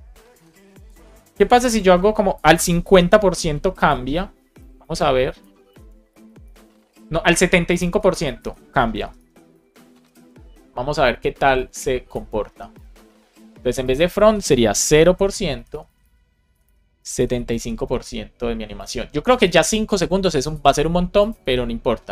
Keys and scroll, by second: 2.7 BackSpace, 4.3 Right, 4.9 Left, 5.3 shift+super+Right, 5.6 super+x, 5.8 Up, 6.8 super+v, 7.2 Up, 7.7 super+Left, 8.0 Right, 8.9 BackSpace, 9.9 Up, 12.4 BackSpace, 15.0 shift+5, 15.4 Down, 16.4 BackSpace, 17.4 shift+5, 17.9 super+d, 19.3 super+s, 21.3 super+r.